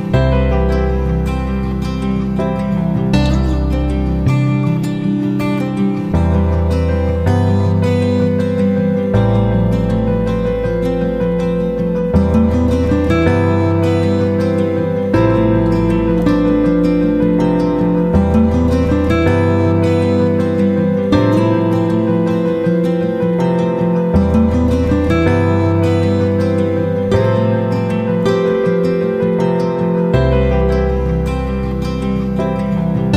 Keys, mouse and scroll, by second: 8.0-9.0 right drag, 9.8 click, 10.9 F9, 11.4 click, 16.6 shift+click, 17.5-33.1 drag.